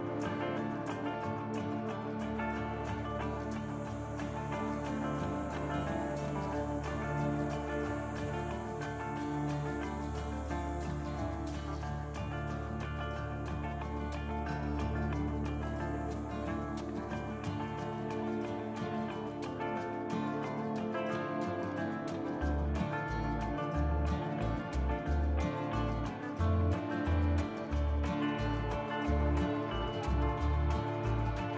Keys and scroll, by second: 1.3 Tab, 2.5 Tab, 4.9 KP_Divide, 17.6 Tab, 20.0 3, 21.9 i, 30.1 ctrl+r.